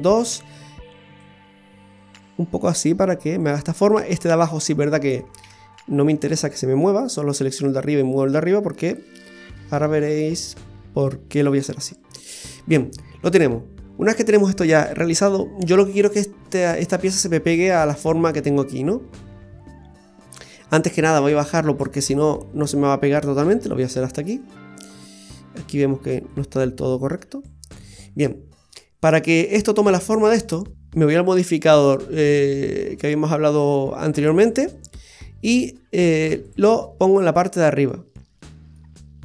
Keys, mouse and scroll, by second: 1.2 click, 4.1 right click, 5.4 ctrl+z, 6.1 ctrl+z, 6.9 right click, 8.3 click, 16.4-17.6 scroll down 1, 18.6-20.3 scroll up 3, 21.3 shift+right click, 22.3 click, 25.6 right click, 26.3 click, 28.7 middle click, 30.6 scroll down 2, 30.7 click, 31.4 click, 36.5 click, 38.7 middle click.